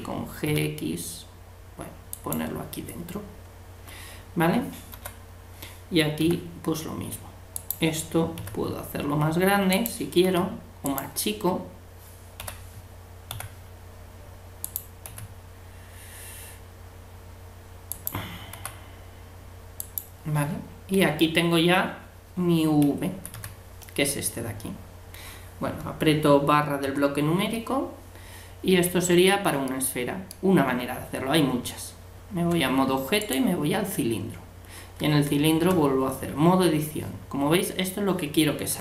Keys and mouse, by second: 4.9 l, 6.2 g, 8.4 s, 10.2 g, 12.4 l, 13.3 g, 15.0 s, 18.5 g, 23.1 a, 23.3 a, 31.7 Tab, 35.1 Tab.